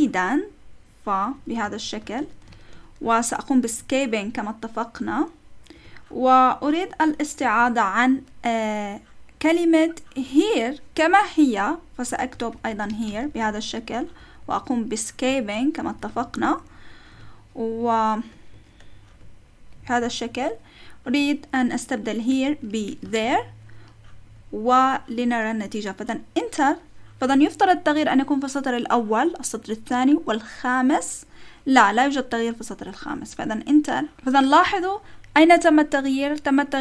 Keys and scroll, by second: 0.0-0.5 typing, 0.7-1.1 Right, 1.6 ., 2.6 >, 3.0 Left, 3.7 \, 4.2-5.0 Left, 5.7-8.1 typing, 6.1 Right, 6.6 Right, 10.2 /, 12.0-13.7 typing, 14.1-14.6 Left, 15.3 \, 15.6 Right, 15.8 Right, 16.0 Right, 16.2 Right, 17.1 \, 18.5 Right, 19.1 \, 19.6 Right, 19.9 Right, 21.0 l, 22.2-24.2 typing.